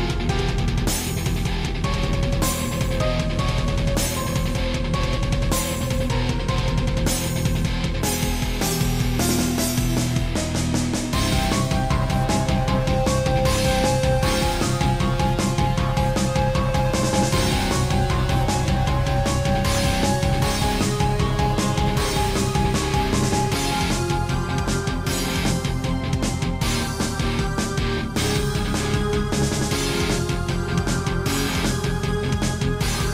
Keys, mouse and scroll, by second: 0.8 click, 1.8 shift+click, 2.8 shift+click, 4.7 shift+click, 6.3 7, 7.1 shift+middle click, 7.4 scroll up 3, 7.8 shift+middle click, 9.6 click, 11.4 shift+middle click, 12.5 g, 13.8 click, 14.9 scroll down 1, 15.3 middle click, 17.4 click, 17.8 scroll down 3, 18.0-19.2 typing, 19.4 click, 19.9 scroll up 1, 20.8 click, 22.3 click, 23.2 click, 23.2 7, 23.9 scroll up 3, 24.7 scroll down 1, 25.0 middle click, 25.7 click, 26.3 scroll down 1, 26.7 middle click, 27.6 middle click, 28.9 alt+r, 29.5 middle click, 31.6 7.